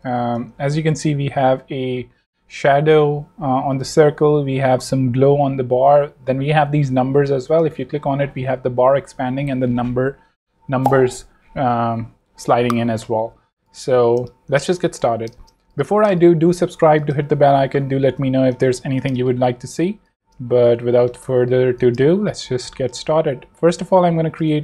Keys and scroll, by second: 0.2 super+Return, 13.2 super+w, 14.3 space, 14.7 alt+z, 15.3 alt+space, 15.6 z, 16.1 space, 17.3 v, 19.1 space, 21.2 space, 22.1 a, 24.5 shift+v.